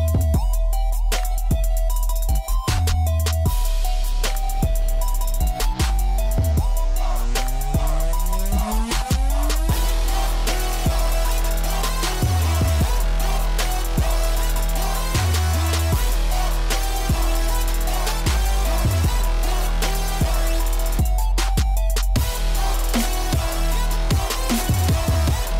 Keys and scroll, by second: 2.2-3.1 typing, 5.3 Escape, 5.3 ctrl+z, 7.6 Escape, 9.9 h, 17.4 9, 17.7 Return, 19.9-21.6 typing.